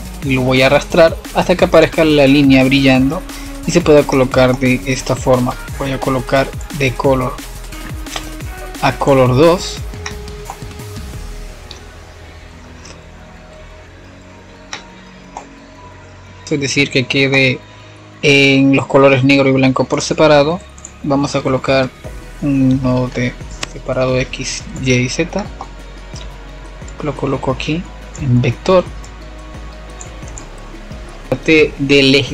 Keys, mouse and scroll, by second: 0.2 click, 1.9 click, 3.7 click, 4.2 shift+a, 11.2-13.7 middle drag, 13.7 click, 19.1-21.2 middle drag, 21.2-21.8 scroll up 1, 21.8-23.7 middle drag, 23.7 click, 24.7 drag, 25.1-27.1 middle drag, 27.1 click, 28.4-32.3 middle drag.